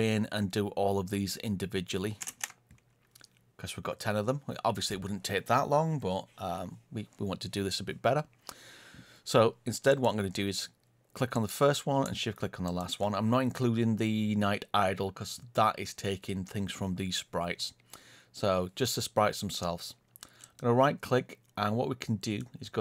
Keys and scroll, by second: 2.2 ctrl+space.